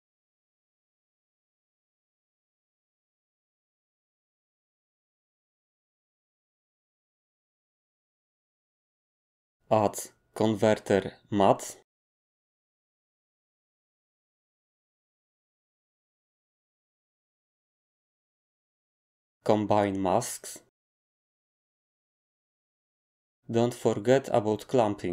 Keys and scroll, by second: 0.0-1.5 typing, 10.1 a.